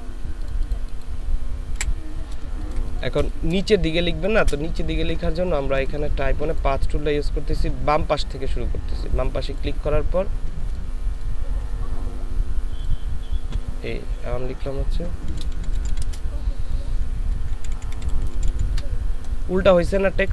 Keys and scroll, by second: 1.8 Delete, 2.6 ctrl+space, 4.1 ctrl+space, 15.3-18.5 typing.